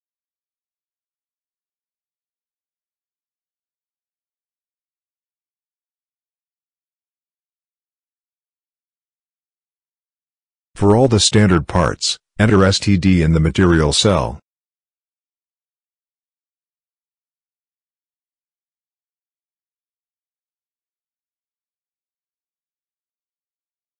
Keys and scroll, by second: 0.6 0, 1.4 ctrl+v, 1.7 BackSpace, 3.5 ctrl+c, 4.0 Tab, 4.9 5, 6.1 ctrl+v, 6.4 BackSpace, 7.7 5, 9.1 ctrl+v, 9.3 BackSpace, 13.1 s, 13.5 t, 15.3 d, 18.2 ctrl+c, 20.5 ctrl+v, 21.4 ctrl+v, 22.9 ctrl+v, 23.8 ctrl+v.